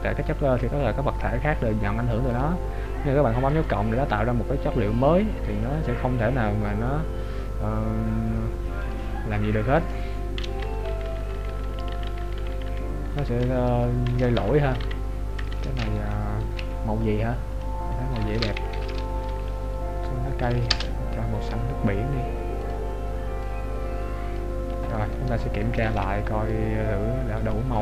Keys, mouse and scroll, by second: 3.6 click, 9.1 click, 11.1-13.3 Left, 11.1 click, 13.6 Right, 14.9 shift+Right, 22.7 click, 26.4 ctrl+b.